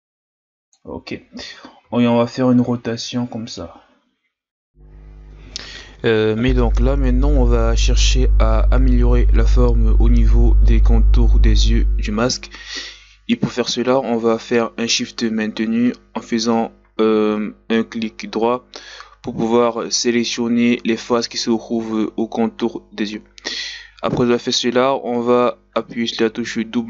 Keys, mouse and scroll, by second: 1.8 r, 6.0 click, 6.3 middle click, 6.9 KP_1, 7.0 Tab, 7.5 shift+scroll up 4, 7.6 Tab, 8.1 right click, 8.3 ctrl+KP_Add, 8.7 scroll up 2, 8.8 ctrl+Tab, 9.3-10.4 shift+right drag, 10.4 ctrl+Tab, 10.9 w, 12.0 Tab, 12.2 Tab, 12.9 right click, 13.1-16.2 shift+right drag, 16.3 ctrl+Tab, 16.8 w, 17.3 Tab, 17.5 a, 17.6-17.9 scroll down 2, 17.9 scroll up 1, 18.1 Tab, 18.3 Tab, 18.7 click, 19.2 o, 19.4 click, 19.7 s, 20.2 Tab, 20.3-20.7 scroll down 4, 20.7 scroll up 1, 20.9 right click, 21.0 middle click, 21.4 KP_1, 21.9 right click, 22.7 Tab, 22.9-23.3 scroll down 2, 23.3 middle click, 24.1-24.7 scroll up 3, 24.3 KP_1, 24.7 Tab, 25.5 right click, 25.8 ctrl+z, 26.1 o, 26.3 right click.